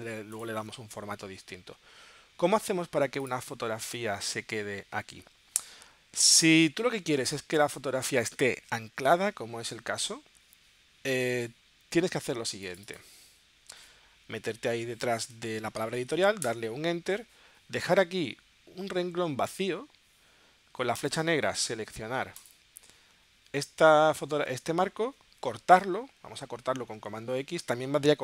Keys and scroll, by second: 7.2 space, 16.5 Return.